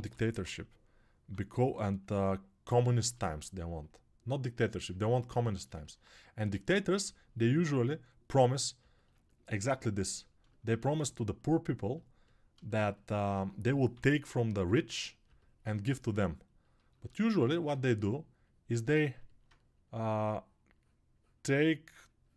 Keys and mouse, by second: 8.9-12.6 ctrl+alt+drag, 8.9-12.6 ctrl+alt+middle drag, 8.9-12.6 ctrl+alt+right drag, 15.2 [.